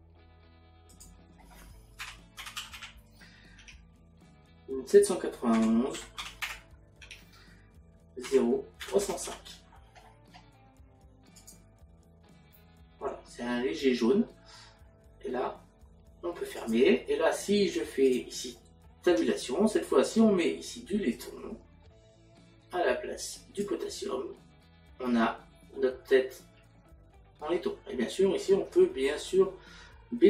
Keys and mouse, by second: 0.9 click, 2.0 KP_Decimal, 3.6 KP_6, 7.0 Tab, 8.3 KP_Decimal, 16.6 click, 18.4 click, 19.1 Tab, 21.1 click, 25.8 middle click.